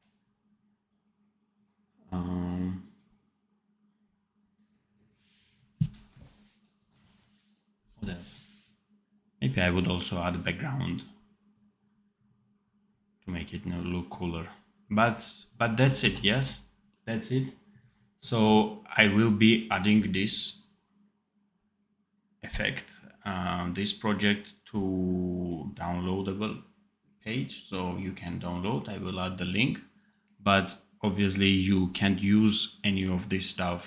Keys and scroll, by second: 16.0 ctrl+s, 16.2 d.